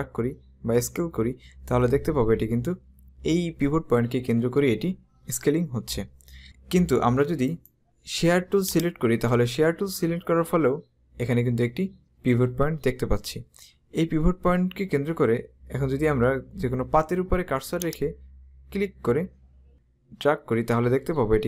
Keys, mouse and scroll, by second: 7.6 right click, 8.9 click, 17.9 click.